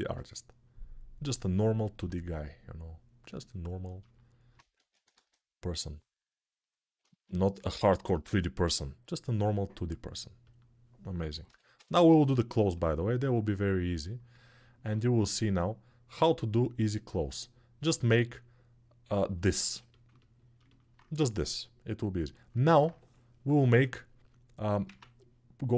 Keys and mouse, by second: 1.4 alt+q, 4.5 ctrl+Tab, 4.9 shift+a, 6.7-9.8 ctrl+alt+drag, 9.8 middle click, 10.3-20.2 drag, 20.2-25.7 alt+shift+right drag, 23.3 ctrl+r, 24.6 Tab.